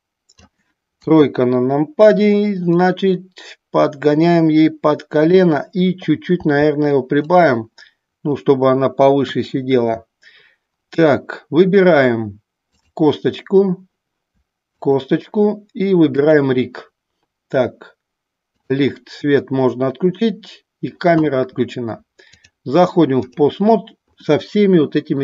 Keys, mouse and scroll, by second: 2.6-5.5 drag, 6.4 s, 7.3 click, 12.8 click, 14.8 click, 16.2 click, 18.5 click, 22.3-23.4 drag.